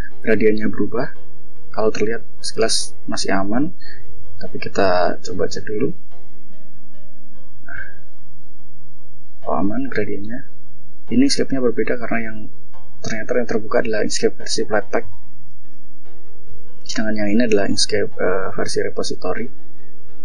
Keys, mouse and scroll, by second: 1.1 click, 4.7 click, 6.2 ctrl+click, 7.7-9.5 drag, 14.0 click, 15.6 click.